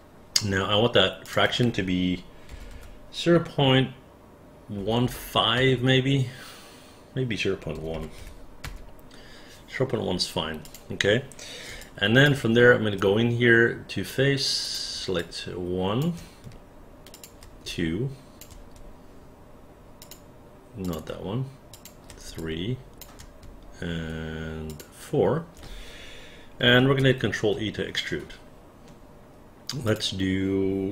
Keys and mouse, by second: 1.4 click, 2.6 KP_0, 2.8 KP_Decimal, 4.9 KP_1, 5.1 KP_5, 5.7 Return, 7.9 KP_0, 8.0 KP_Decimal, 8.3 KP_1, 8.7 Return, 10.8 click, 11.9 alt+click, 13.1-14.2 alt+right drag, 14.8 click, 15.3 alt+click, 17.2 shift+click, 17.8 alt+click, 20.1 shift+click, 21.8 shift+click, 22.5 alt+click, 24.8 shift+click, 27.1 ctrl+e, 30.0 click.